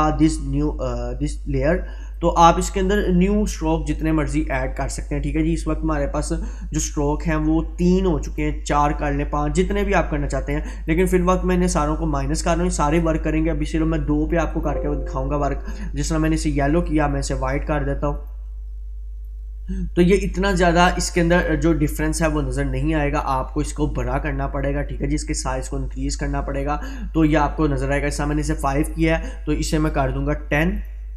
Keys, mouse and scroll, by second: 2.2 click, 6.1-7.0 scroll down 1, 8.3 click, 10.9 click, 16.9-20.2 drag.